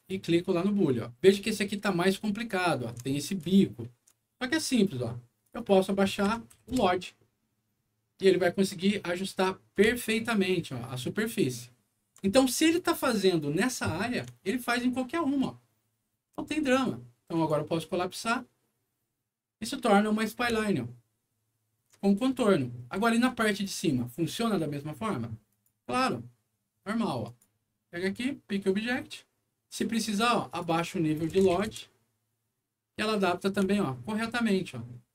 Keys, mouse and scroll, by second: 1.4-2.8 alt+middle drag, 3.5 alt+middle click, 5.4 alt+click, 5.5 alt+click, 6.5 End, 6.7 Return, 9.9-12.1 alt+middle drag, 12.6 alt+scroll down 2, 13.4 alt+scroll up 2, 14.4-16.2 alt+middle drag, 17.3 alt+click, 20.5-21.7 alt+middle drag, 22.1 alt+middle click, 23.6 alt+click, 25.5 click, 27.2 click, 28.0 click, 30.5 click, 30.6 click, 31.3 KP_0, 31.7 Return, 33.7-35.1 alt+middle drag.